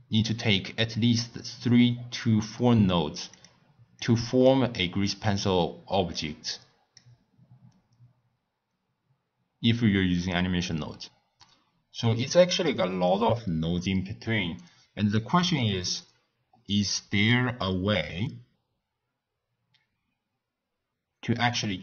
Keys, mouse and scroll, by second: 3.3 click, 4.0 click, 6.1 click, 12.5 click, 13.8 click.